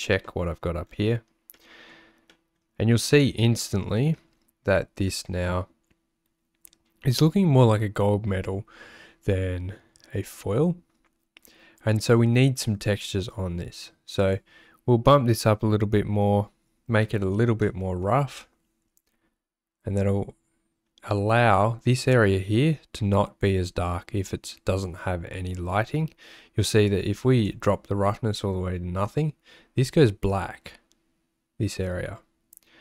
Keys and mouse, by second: 1.6 click, 2.3 click, 3.6 click, 14.3-18.5 drag, 26.9 click.